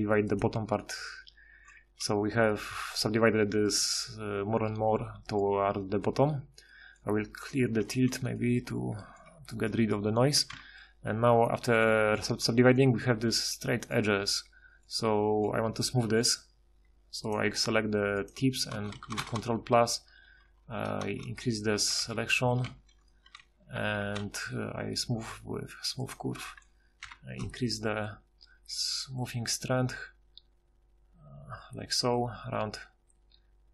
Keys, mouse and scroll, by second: 1.5 a, 1.8 a, 2.9 a, 6.2 a, 7.8 alt+t, 9.3 a, 10.6 Tab, 15.7 Tab, 18.7 ctrl+KP_Add, 19.0 ctrl+KP_Add, 19.4 ctrl+KP_Add, 19.6-20.2 ctrl+KP_Add, 20.3 ctrl+KP_Add, 20.5 ctrl+KP_Add, 20.7 ctrl+KP_Add, 21.1 ctrl+KP_Add, 22.0 ctrl+z, 22.7 ctrl+shift+z, 23.8 ctrl+shift+h, 27.1 F6, 28.3 F6.